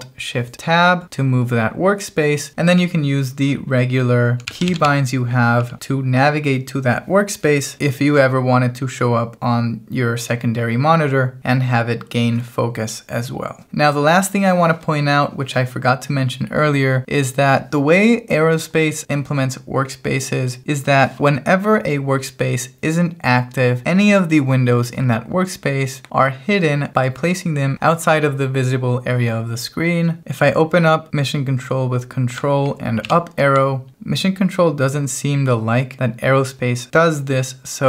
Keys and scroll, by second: 3.2-5.3 typing, 30.2 alt+t.